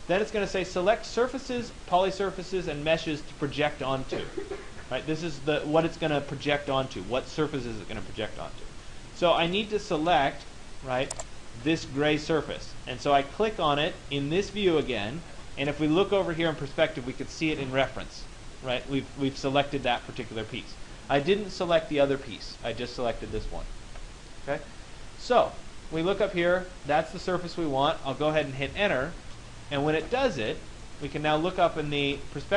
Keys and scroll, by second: 1.3 Return, 29.2 Return.